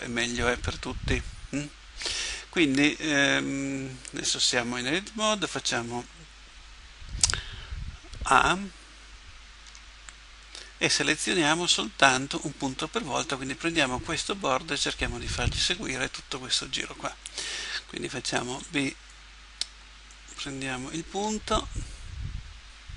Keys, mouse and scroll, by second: 9.7 a, 18.5 b, 21.2 g.